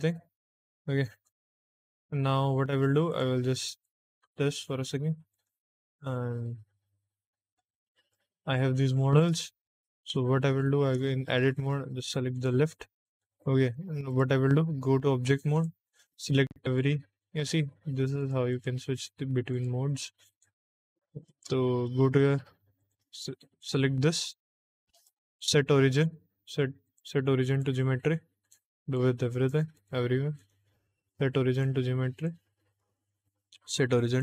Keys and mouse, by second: 3.0 click, 4.0 n, 5.2 click, 7.5 click, 9.4 shift+middle click, 10.1 middle click, 11.0 shift+middle click, 12.2 click, 13.1 middle click, 13.6 Tab, 14.0 click, 15.4 click, 16.3 middle click, 19.0 click, 19.5 click, 19.8 click, 20.2 click, 20.8 middle click, 21.5 shift+middle click, 22.7 click, 23.5 click, 24.0 click, 24.8-27.5 right drag, 28.3 click, 28.7 click, 29.3 click, 29.7 click, 30.3-31.5 right drag, 32.1 click, 32.6-34.1 right drag.